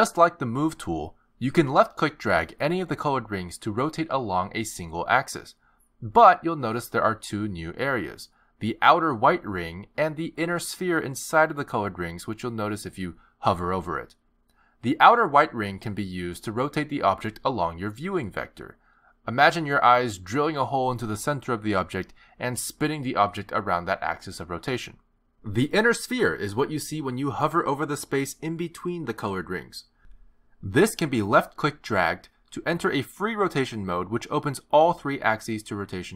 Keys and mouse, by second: 2.5 click, 6.0 click, 9.5 click, 12.9 click, 17.5 click, 30.1 click.